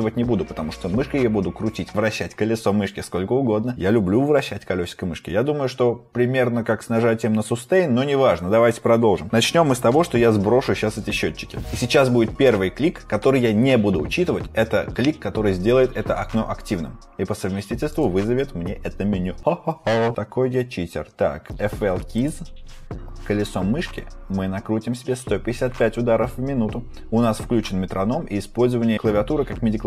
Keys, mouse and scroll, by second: 10.5-12.2 typing, 17.8 right click.